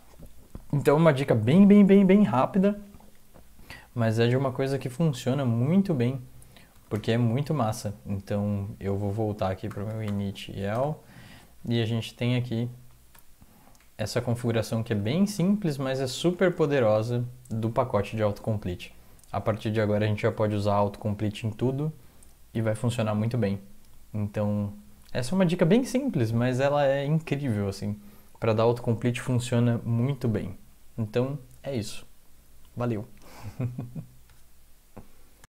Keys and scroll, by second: 6.7 ctrl+x, 6.9 b, 9.7-10.0 typing, 10.2 Tab, 10.7 Return, 12.3 Down, 12.5 Down, 12.6 Down, 12.8 Down, 13.0-14.9 typing, 15.3 ctrl+s, 15.7 Up, 15.9 Up, 16.1 Up, 16.3 Up.